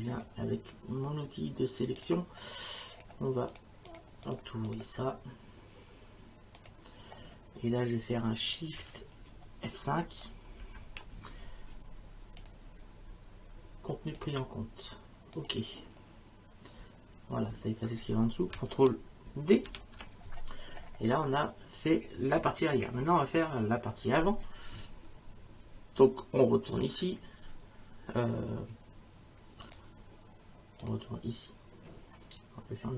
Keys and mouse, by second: 2.0 click, 6.6 click, 10.6 shift+F5, 12.4 click, 14.2 click, 15.3 click, 19.7 ctrl+d, 26.8 click, 29.6 click, 30.8 click.